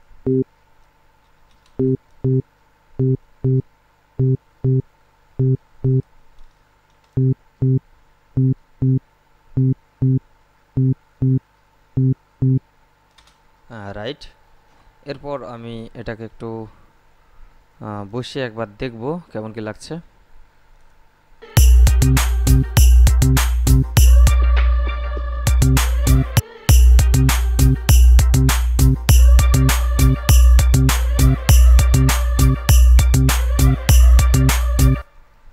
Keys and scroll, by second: 1.1 space, 6.2 space, 13.0 space, 21.7 space, 35.1 space.